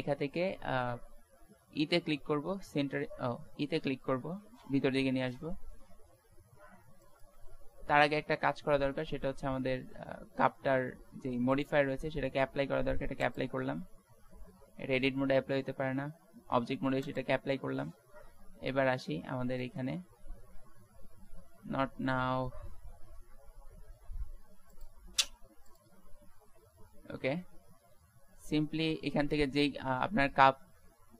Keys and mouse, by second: 2.0 e, 2.2 s, 4.5 e, 7.8 ctrl+z, 11.5-14.6 drag, 14.6 Tab, 17.1-18.4 drag, 18.4 Tab, 25.7-26.9 middle drag, 29.1-31.0 middle drag, 31.0 middle click.